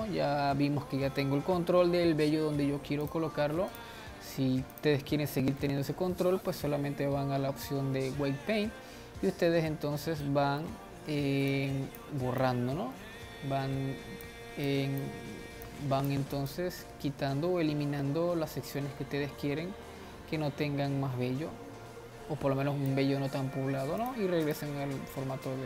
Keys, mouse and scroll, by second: 3.3-6.0 drag, 6.0-9.1 middle drag, 10.7-11.9 middle drag, 11.9-20.3 drag, 24.8-25.6 drag.